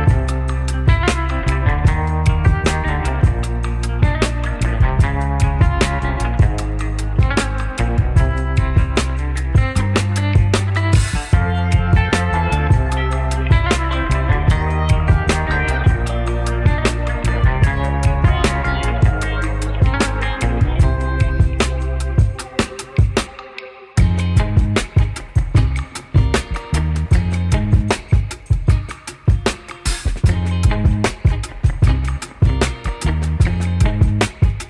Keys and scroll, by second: 3.2 ctrl+shift+e, 3.8 ctrl+shift+e, 4.4 ctrl+shift+e, 5.0 ctrl+shift+e, 7.6 F3, 9.8 1, 10.0 F3, 11.0 F3, 11.5 alt+Delete, 15.5 alt+c, 17.8 ctrl+shift+e, 18.7 ctrl+shift+e, 22.1 alt+c, 26.4 F3, 27.2 F4, 28.5 F4, 29.4 2, 30.2 F4, 31.7 2, 31.8 F4, 32.0 2, 32.2 F4, 33.0 F4, 33.8 ctrl+shift+c.